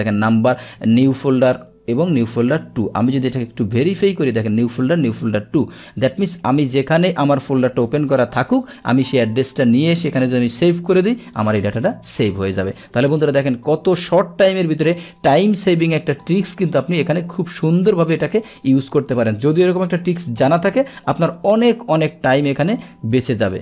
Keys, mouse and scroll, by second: 3.1 click, 3.8 click, 6.2 drag, 8.4 click, 11.4 click, 13.4 Escape, 14.1 click, 15.0 click, 16.3 click, 18.1 click, 19.0 click, 20.0 Delete, 21.0 Return, 22.6 click.